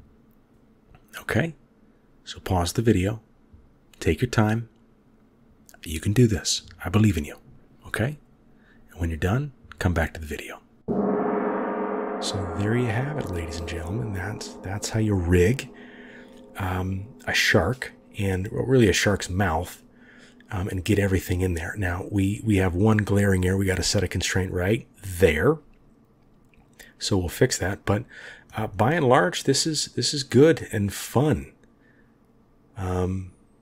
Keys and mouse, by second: 1.1 middle click, 2.3 middle click, 3.2 click, 4.7-7.1 drag, 7.2-9.0 drag, 7.6-9.0 right drag, 10.1 click, 28.7-33.6 drag, 28.7-33.6 middle drag.